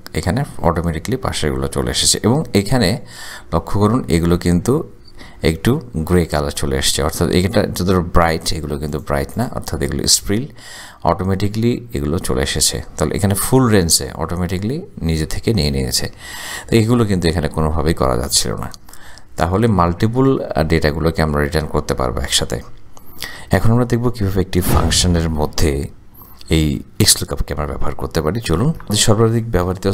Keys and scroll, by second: 28.9 typing.